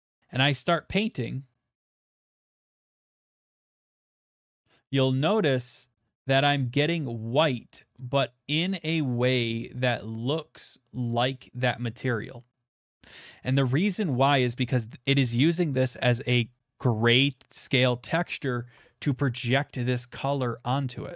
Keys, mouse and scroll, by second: 1.1-1.9 ], 2.4 click, 2.5 click, 2.8 click, 2.9 click, 3.1 click, 3.4 click, 3.6 click, 4.1 click, 4.3 click, 4.6 click, 5.2-8.6 drag, 9.3 click, 11.0 middle click, 12.3 middle click, 12.8 middle click, 19.4 middle click, 19.5 middle click.